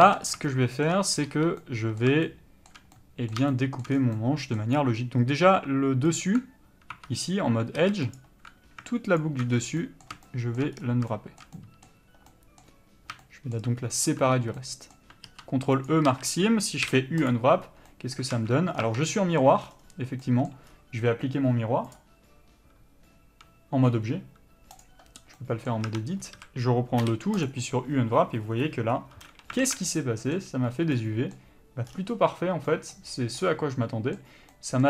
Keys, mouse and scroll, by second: 0.2 alt+a, 0.4 scroll up 1, 0.6 shift+middle click, 1.4 3, 1.8 middle click, 4.1 scroll down 1, 4.3 middle click, 4.9 scroll up 1, 6.4 alt+click, 7.1 2, 7.9 alt+a, 8.3 alt+click, 9.7 scroll down 1, 10.0 middle click, 10.9-11.3 scroll up 1, 11.3 shift+middle click, 14.0 scroll up 1, 14.8 middle click, 16.0 ctrl+e, 16.2 a, 17.5 u, 18.5 alt+a, 18.9 scroll down 1, 19.0 Tab, 19.2 middle click, 19.6 scroll down 1, 20.4 middle click, 20.9-22.0 scroll up 1, 25.0 click, 25.5 middle click, 26.0 Tab, 26.4 scroll up 1, 26.5 a, 27.7 u, 29.8 alt+a, 34.7 middle click.